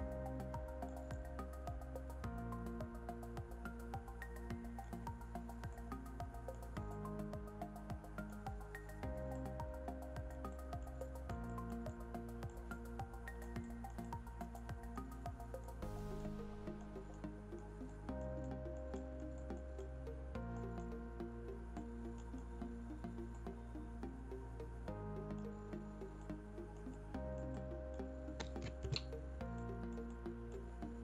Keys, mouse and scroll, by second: 4.8-5.6 scroll down 1, 5.6 click, 8.5-9.2 scroll down 1, 9.2 click, 15.1-15.5 scroll down 1, 15.5 click, 22.4-23.3 scroll down 1, 23.3-25.4 drag, 28.7 ctrl+z, 29.5 click, 30.9-31.0 scroll up 1.